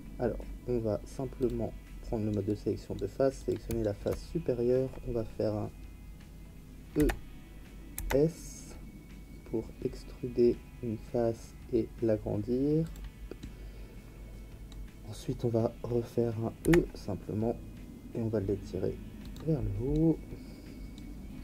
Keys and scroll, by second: 6.9 e, 7.9 s, 16.6 e.